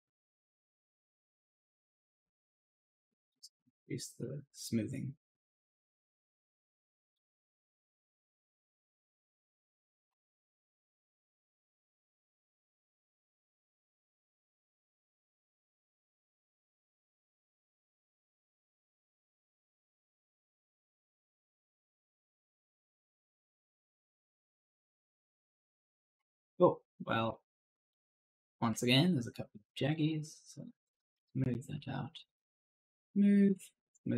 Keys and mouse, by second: 1.6 right click, 1.8 s, 2.2 click, 7.1 right click, 7.3 s, 8.3 click, 9.3 right click, 9.4-10.1 typing, 11.0 right click, 11.2 s, 12.0 right click, 12.0 s, 13.1 s, 13.2 right click, 13.4 q, 14.6 click, 16.8 right click, 16.9-17.6 typing, 18.4 click, 21.3-22.3 typing, 21.3 right click, 21.8 right click, 23.5 click, 25.6 right click, 26.0 q, 27.1 click, 27.6-28.8 typing, 27.8 right click, 29.4 click, 31.3 right click, 31.4 w, 31.6 e, 32.5 click.